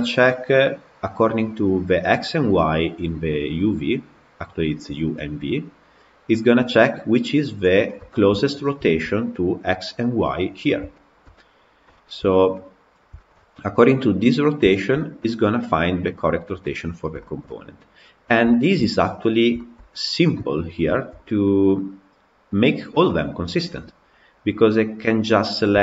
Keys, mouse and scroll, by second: 7.6-8.0 scroll down 7, 8.0-9.2 shift+middle drag, 9.2-9.7 scroll up 2, 9.7 middle click, 10.4-10.8 scroll up 3, 10.8 shift+middle click, 11.5-12.4 scroll down 3, 11.8 shift+middle click, 12.4-16.8 middle drag, 16.8 scroll up 1, 17.0 shift+middle click, 17.7-18.3 scroll up 4, 18.3 shift+middle click, 18.9 scroll up 2, 19.4-20.5 shift+middle drag, 20.5 scroll up 1, 20.7-25.8 shift+middle drag.